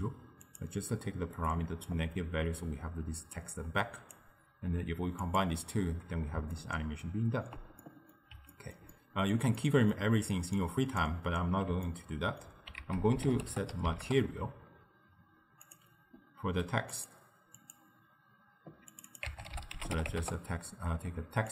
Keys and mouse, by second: 0.5-1.6 drag, 1.9-4.9 drag, 5.3 click, 6.6-10.7 ctrl+middle drag, 10.7 click, 11.9 ctrl+middle click, 12.9 ctrl+a, 16.9 click, 17.6-21.5 drag.